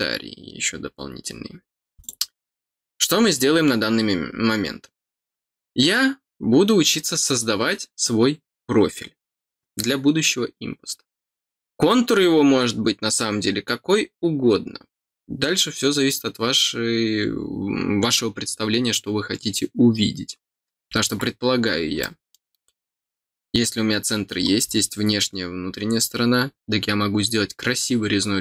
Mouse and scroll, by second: 2.0 click, 21.7 scroll up 4, 22.0 middle click, 24.3 scroll down 1.